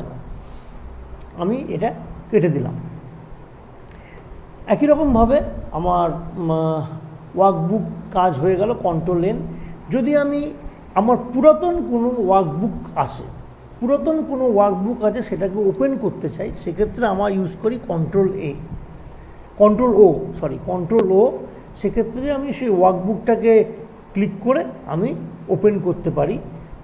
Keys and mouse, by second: 1.9 click, 4.3 click, 17.6 ctrl+o, 24.3 click.